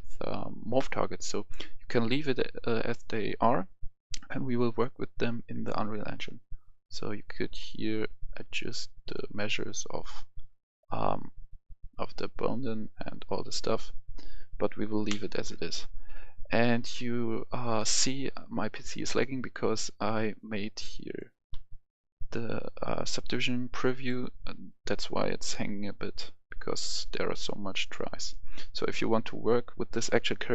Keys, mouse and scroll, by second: 0.5-4.3 scroll up 1, 7.4-9.4 drag, 15.1 ctrl+z, 20.5-21.1 scroll down 1, 21.1 click, 21.4 click, 21.5-23.9 scroll down 1, 23.9 click, 29.6 click.